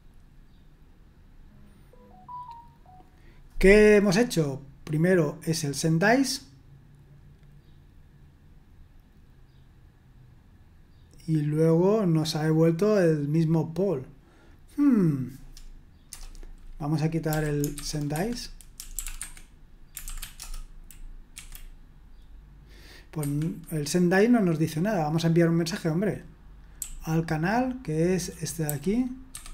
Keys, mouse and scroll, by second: 14.5 click, 16.1 Return, 17.3-21.3 typing, 18.1 Escape, 23.2 Escape, 26.8-29.5 typing.